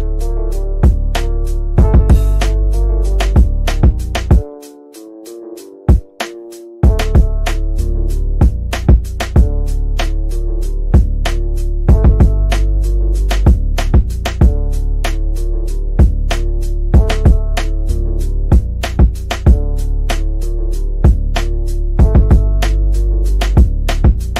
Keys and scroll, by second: 4.8 ctrl+z, 7.1 shift+F2, 7.4 Escape, 15.9 F3.